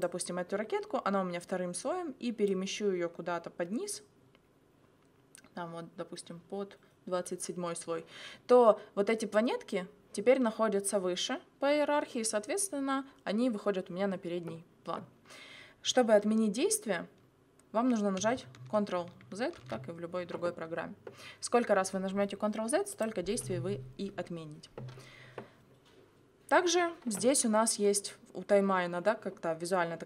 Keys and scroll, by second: 19.6 ctrl+z.